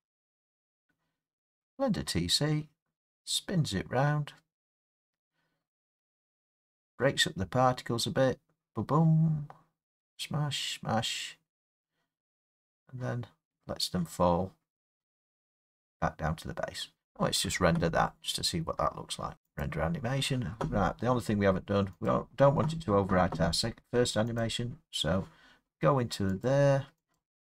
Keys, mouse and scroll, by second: 16.9 space, 19.6 click, 22.1 click, 24.4 click, 26.5 click, 27.1 click.